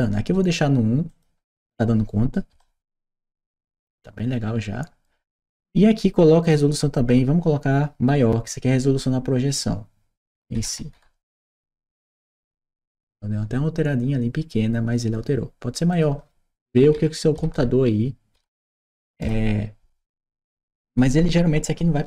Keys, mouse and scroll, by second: 0.9 click, 1.4 1, 2.4 Return, 3.3-5.3 right drag, 6.3 click, 10.1-11.3 typing, 11.5 Return, 15.7 click, 16.6-18.2 typing.